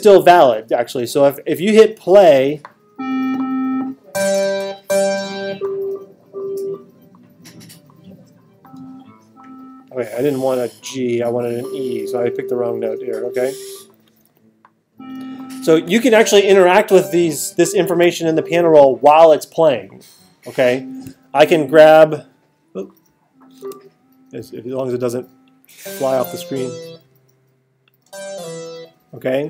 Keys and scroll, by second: 24.4 space.